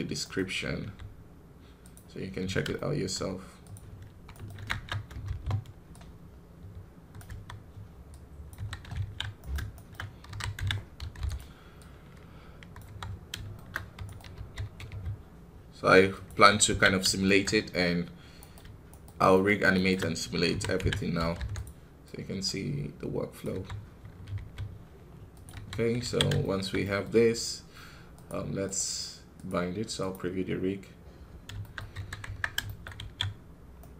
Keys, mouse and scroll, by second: 0.7 g, 2.6-4.5 shift+middle drag, 4.5 shift+Tab, 6.0-7.1 drag, 7.1 KP_3, 8.4 KP_1, 8.9 alt+a, 9.3-10.3 right drag, 12.7 click, 12.7 KP_3, 13.1 scroll up 1, 13.4-15.0 shift+middle drag, 16.2 KP_1, 16.6 alt+a, 16.8 scroll down 3, 17.1 shift+middle click, 17.3-17.9 scroll up 3, 18.3-19.4 right drag, 19.6 shift+right click, 21.9-23.4 drag, 23.4 KP_3, 23.8-24.2 scroll up 1, 25.4 KP_1, 25.7 scroll down 4, 25.9 alt+a, 26.3-31.1 shift+middle drag, 31.1 scroll up 1, 31.5 shift+middle click, 31.7 scroll up 2, 31.8 KP_1, 32.6 shift+middle click, 32.8 scroll up 1, 32.9 alt+a.